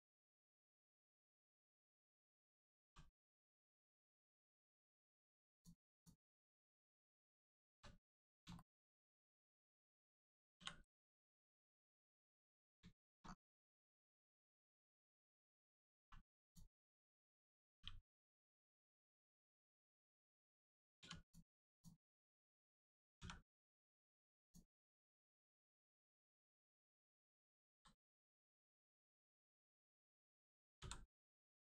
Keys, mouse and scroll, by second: 0.7 click, 5.5 click, 6.2 scroll down 1, 6.6 shift+middle click, 7.7 3, 8.0 click, 8.5 shift+middle click, 10.5 middle click, 10.8 right click, 11.8 click, 12.9 shift+middle click, 13.3-13.6 scroll up 1, 14.3 click, 14.6-15.0 scroll up 1, 15.2 shift+middle click, 15.9 middle click, 16.0 1, 16.4 click, 17.6 g, 18.2 right click, 18.7 click, 20.9 2, 21.2 click, 21.7 shift+click, 23.1 click, 24.3 click, 27.6 ctrl+z, 30.7 v.